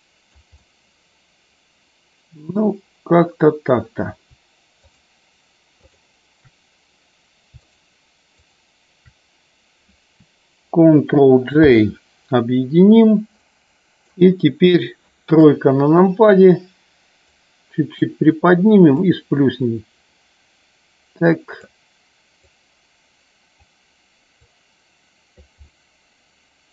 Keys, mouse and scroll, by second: 0.5-2.5 middle drag, 5.8 shift+click, 7.5 shift+click, 8.4 shift+click, 11.5 ctrl+j, 13.4-14.2 middle drag, 15.3 KP_3, 17.2 click, 18.9-21.5 drag, 22.3-23.5 drag, 24.4 click, 25.5-26.7 middle drag.